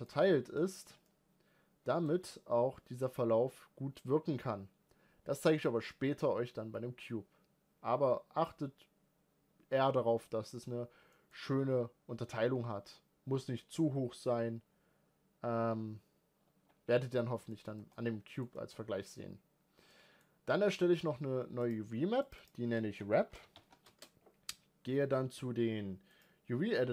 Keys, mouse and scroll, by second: 0.7-1.1 scroll up 2, 1.1-2.2 middle drag, 2.2-11.1 scroll down 1, 11.1 middle click, 11.4-13.8 scroll up 2, 13.8-16.7 scroll up 1, 16.7 Tab, 17.3 scroll down 1, 17.5 middle click, 18.0 scroll up 2, 18.2-21.7 middle drag, 21.7-22.3 drag, 22.4-26.9 drag.